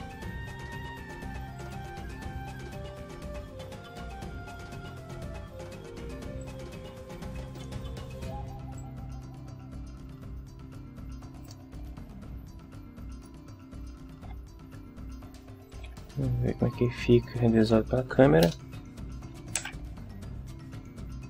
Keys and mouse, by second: 1.6 click, 6.4-7.7 drag, 8.7-11.6 drag, 13.1 right click, 14.2 KP_7, 15.7 r, 17.5 click, 18.4 KP_0, 19.6 shift+f.